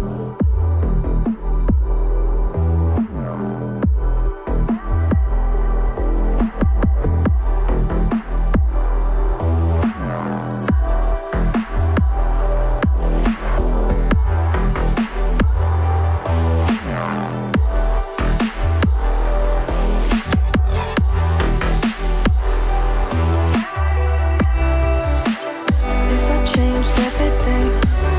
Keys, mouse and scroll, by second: 1.9-3.6 ctrl+scroll up 1, 4.1-6.3 ctrl+scroll down 1, 7.7 right click, 10.2 ctrl+z, 10.9 double click, 12.6 ctrl+click, 13.1 right click, 16.1 right click, 27.0-27.6 ctrl+scroll down 1.